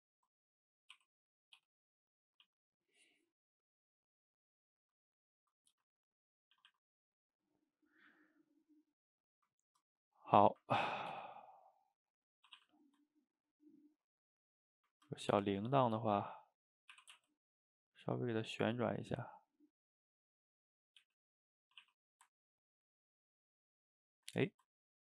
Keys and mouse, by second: 0.6 drag, 1.0 r, 1.6 g, 2.3 a, 2.5 a, 2.7-4.4 middle drag, 4.4 click, 4.6-5.8 middle drag, 5.8 g, 6.6 a, 6.7 a, 6.9-10.2 middle drag, 10.2 click, 10.3-11.2 middle drag, 11.2 g, 12.5 a, 12.6 a, 13.2-14.5 ctrl+middle drag, 14.5 click, 14.7 middle click, 15.4 g, 16.1-17.0 middle drag, 17.0 r, 20.6 middle click, 21.1 g, 21.7 a, 21.9 a, 22.1-25.1 middle drag.